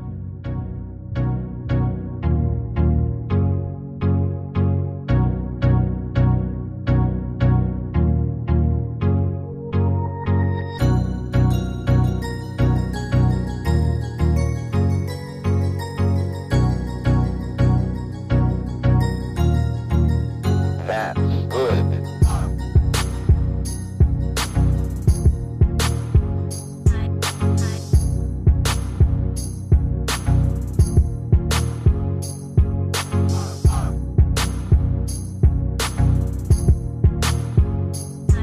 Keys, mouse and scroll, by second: 4.8-5.2 ctrl+scroll down 1, 6.0 ctrl+scroll down 1, 7.6-8.8 ctrl+scroll down 1, 8.8 shift+click, 24.0 ctrl+click, 30.9 ctrl+click.